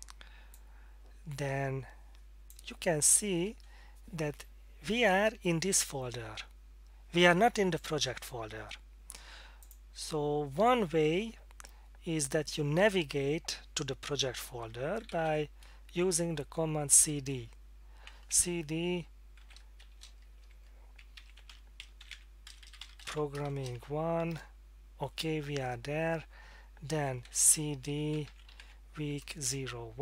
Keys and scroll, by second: 14.8-16.0 typing, 19.4-24.8 typing, 27.0-29.0 typing, 29.4 Return.